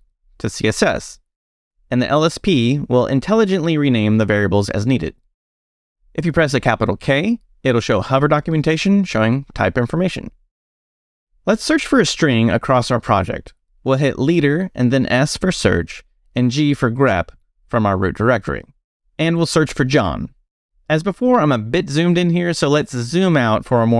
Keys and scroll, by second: 2.1 BackSpace, 3.2 c, 3.5 s, 4.5 Return, 8.0 shift+k, 13.9 space, 15.6 s, 17.6 g, 19.3-21.6 typing, 23.1 super+-, 23.6 super+=.